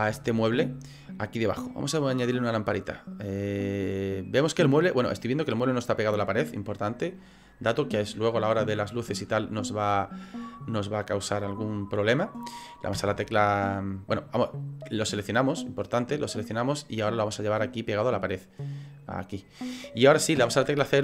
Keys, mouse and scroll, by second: 0.1 shift+middle click, 0.6-1.1 scroll up 2, 1.1 middle click, 2.8 click, 3.8 middle click, 7.1 click, 12.9 KP_0, 15.5 click, 17.6 click, 20.4 KP_0.